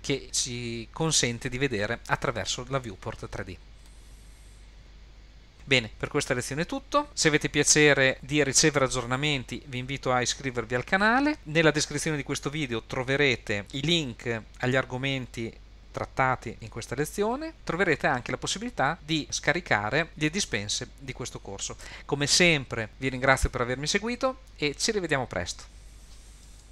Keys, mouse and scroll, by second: 3.9-4.8 middle drag, 5.1-5.4 scroll up 2.